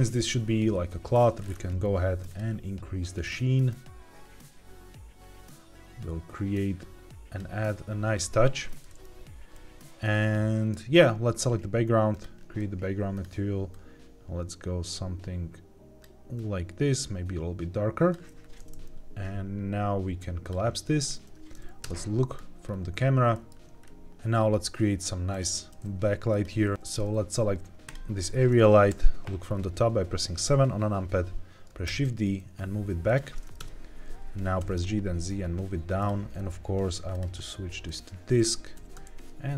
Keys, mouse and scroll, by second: 1.3-2.2 scroll down 2, 2.2 drag, 3.1-7.3 drag, 9.4-10.7 middle drag, 10.8 click, 12.0 click, 13.0 click, 20.1 click, 20.9 scroll down 2, 21.7 KP_0, 22.6-23.1 scroll down 2, 23.2 shift+middle click, 23.7 scroll up 2, 25.2 click, 25.6 g, 26.2 click, 27.8 click, 28.8 KP_7, 29.4 scroll down 2, 30.8-31.6 scroll down 1, 31.8 shift+d, 33.0 click, 33.5 KP_0, 34.5 g, 34.7 z, 35.9 click, 37.0 click, 38.7 g, 39.0 shift+z.